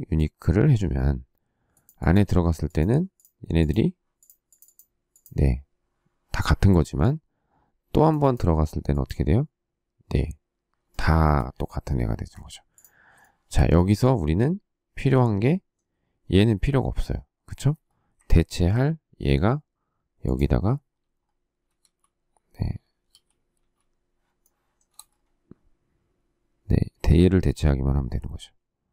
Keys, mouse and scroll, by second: 10.8 shift+middle click, 12.2 Escape, 13.1 shift+middle click, 18.4 ctrl+v, 21.7 shift+z, 23.1 shift+s, 23.5 shift+z, 24.3 shift+middle click.